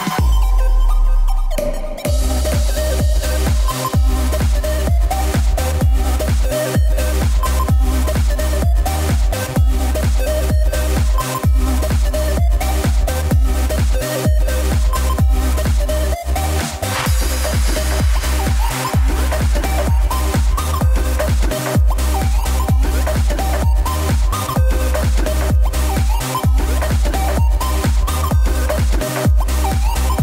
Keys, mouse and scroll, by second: 0.2 click, 0.4 scroll down 1, 0.6-1.2 middle drag, 1.2-1.7 scroll down 4, 1.7 click, 2.1 KP_7, 2.7-3.3 shift+middle drag, 3.3 scroll up 1, 4.1 Tab, 5.0 ctrl+r, 13.0 ctrl+r, 15.3 click, 24.2-25.4 middle drag, 25.4 click, 26.6 Tab, 26.8 click, 27.0 scroll down 3, 27.2-27.7 middle drag, 27.7 scroll down 1, 28.0-30.2 shift+middle drag.